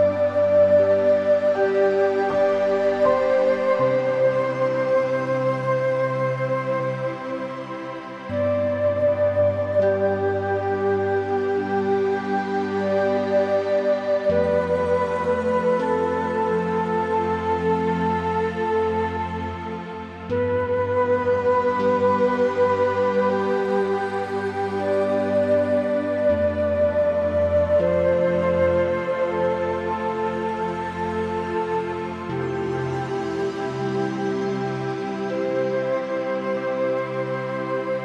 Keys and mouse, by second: 0.5 2, 1.2 click, 1.7 click, 2.1 shift+click, 3.4 shift+click, 6.3-7.5 shift+drag, 7.6 shift+middle click, 8.0-9.3 shift+drag, 10.8 shift+click, 11.6 shift+middle click, 12.0 middle click, 14.2 ctrl+b, 17.2 e, 20.3 middle click, 21.5 s, 23.4 click, 23.8 middle click, 24.0 shift+middle click, 25.0 shift+click, 25.6 ctrl+b, 27.2 Tab, 27.3 click, 28.2 click, 28.6 middle click, 29.0 middle click, 29.8 middle click, 30.4 middle click, 30.8 click, 31.3 Tab, 32.4 ctrl+z, 32.5 ctrl+z, 32.7 ctrl+z, 32.9 ctrl+z, 34.4 click, 34.8 Tab, 35.0 middle click, 35.8 middle click, 37.0 click, 37.6 middle click.